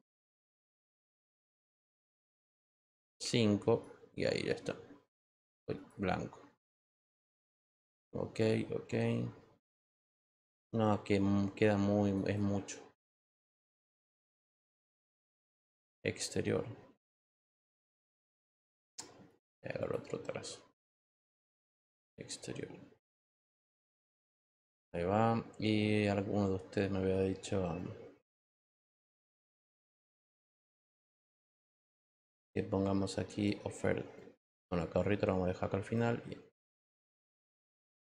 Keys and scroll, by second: 3.2 5.